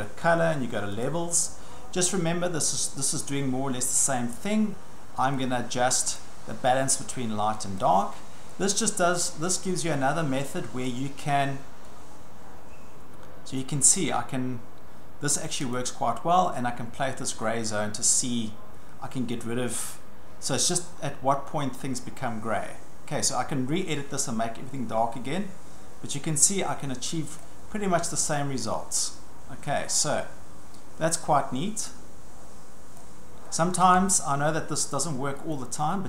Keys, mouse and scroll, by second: 1.0 click, 6.2 click, 7.8 click, 10.9 click, 15.7 click, 27.4 click, 33.0 click, 34.1 click, 35.5 click.